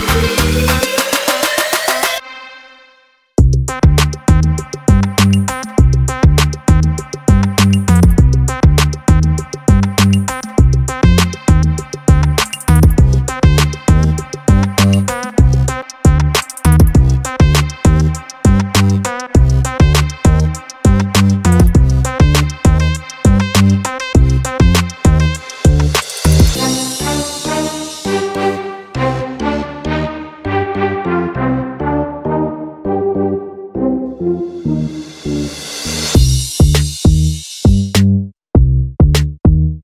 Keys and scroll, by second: 5.2 ctrl+v, 11.3 ctrl+t, 19.8 ctrl+-, 20.1 ctrl+-, 20.3 ctrl+-, 38.0 Return.